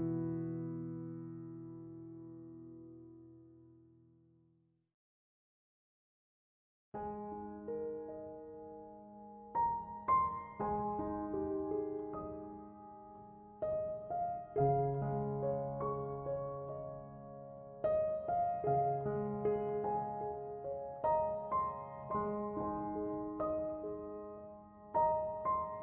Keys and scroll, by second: 19.4 c, 19.6 o, 19.9 m.